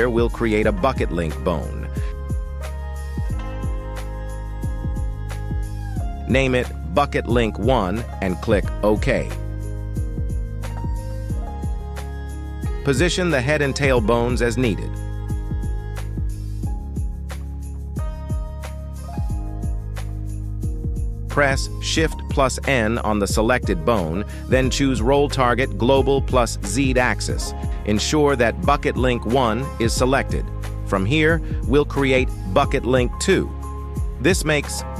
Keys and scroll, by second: 3.5 b, 3.9 u, 4.5 c, 4.9 e, 6.0 l, 6.4 n, 6.8 1, 7.2 Return, 9.0 g, 10.4 Tab, 11.7 shift+s, 13.1 Tab, 14.1 shift+s, 16.1 Tab, 19.0 shift+s, 20.2 Tab, 21.7 shift+s, 23.9 shift+n, 27.2 g, 27.9 Escape, 29.3 g, 30.0 Escape, 34.2 2, 34.4 Return.